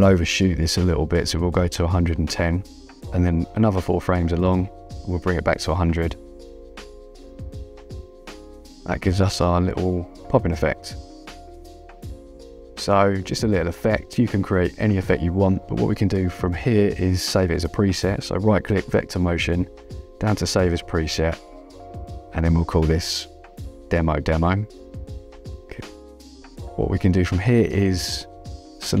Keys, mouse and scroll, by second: 2.7 KP_0, 2.8 KP_Enter, 2.9 Return, 4.1 Right, 6.9 click, 7.9 KP_1, 8.2 KP_0, 8.9 KP_Enter, 10.6 click, 11.7 space, 14.8 right click, 17.6 right click, 19.9 click, 22.1-25.2 typing, 25.7 Return, 26.9 -, 28.3 click, 28.9 -.